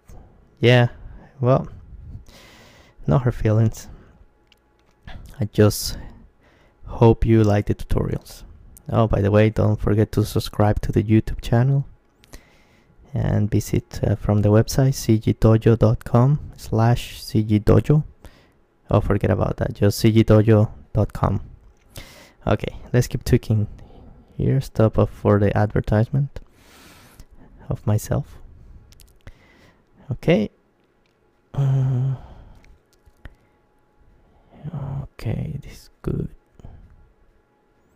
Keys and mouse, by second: 0.3-2.6 drag, 2.6-3.7 middle drag, 3.7 click, 4.0-6.9 middle drag, 5.9 g, 6.9 g, 9.7-11.6 drag, 11.1 middle click, 11.6-14.5 middle drag, 13.1-15.6 right drag, 14.5 g, 15.4 g, 15.7-17.2 drag, 17.2 middle click, 17.5 click, 17.9 KP_Decimal, 18.2-21.4 middle drag, 20.0-22.1 right drag, 22.1 g, 22.5 middle click, 25.7-27.6 drag, 26.2 g, 27.7-29.0 drag, 28.4 Tab, 29.0 middle click, 29.8 click, 29.9 middle click, 30.4 Tab, 31.5 KP_Decimal, 32.4 middle click, 33.2 middle click, 33.6 Tab, 34.8-37.9 middle drag.